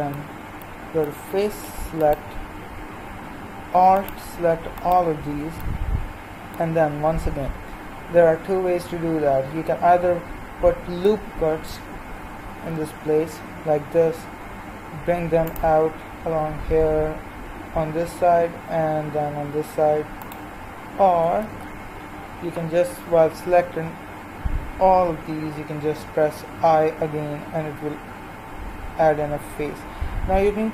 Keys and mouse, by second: 0.2-4.7 middle drag, 2.0-6.4 right drag, 5.8-11.3 drag, 6.4-11.5 middle drag, 12.5 ctrl+r, 21.4 ctrl+z, 26.5 i.